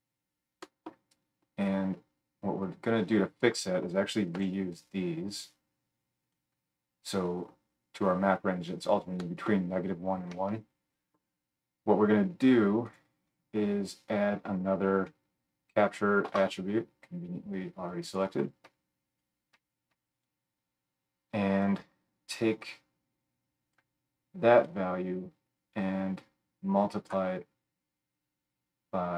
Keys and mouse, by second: 2.6-6.3 drag, 4.3 g, 12.9 click, 14.2 F3, 14.2-19.2 middle drag, 19.2-29.1 drag.